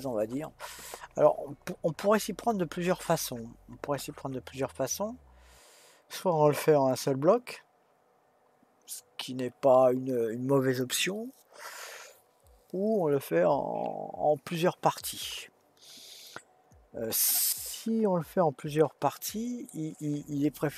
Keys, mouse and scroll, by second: 18.0-20.7 middle drag.